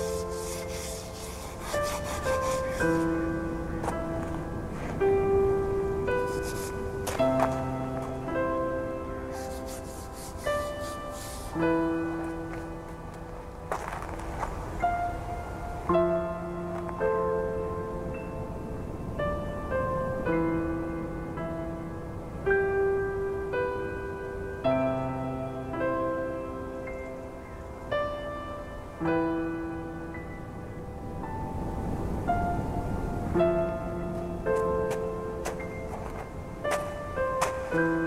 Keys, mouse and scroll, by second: 1.5-1.9 scroll up 5, 2.2 shift+middle click, 2.5 scroll up 3, 3.1 g, 7.8 scroll down 1, 8.0-9.5 typing, 8.7 scroll down 1, 9.0 Tab, 10.0-10.6 shift+middle drag, 10.6-12.8 scroll up 2, 12.8-13.4 shift+middle drag, 13.4-13.7 scroll up 1, 13.7 click, 14.2 Tab, 15.1 ctrl+r, 16.2 a, 16.4 a, 16.7 scroll down 3, 16.9 Tab, 17.4 a, 17.6 a, 17.7 scroll down 2, 18.1-18.6 shift+middle drag, 18.6-19.6 scroll up 1, 19.6 click, 20.7 click, 21.2 Tab, 21.6 shift+middle click, 22.1-23.5 scroll up 10, 23.5 scroll down 1, 23.8 Tab, 24.1-25.1 right drag, 25.1 click, 25.4 right click, 26.2-26.6 scroll down 10, 27.0 a, 27.2 a, 27.6-28.2 shift+middle drag, 28.2-29.6 scroll up 1, 29.6-34.8 shift+middle drag, 34.8 shift+a, 36.3-37.2 scroll down 1, 37.2 ctrl+3, 37.7-38.0 right drag.